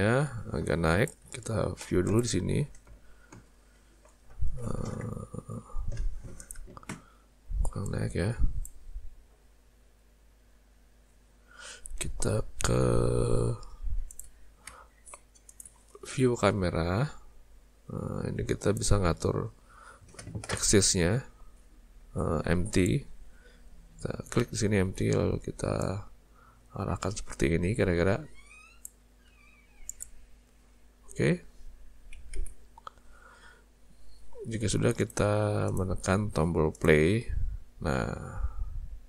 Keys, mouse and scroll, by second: 7.9 click, 9.3 z, 14.3 z, 18.6 click, 22.7 click, 29.3 z, 32.4 alt+a, 35.0 click, 35.7 click, 36.8 click.